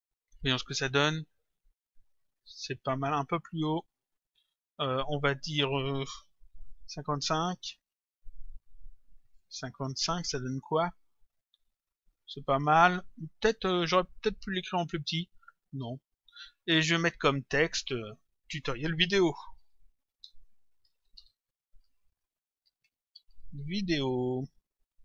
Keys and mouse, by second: 0.7 click, 5.4 click, 9.3 Return, 10.5 click, 16.4 click, 18.2 click, 19.7-21.6 typing, 22.7-23.6 typing.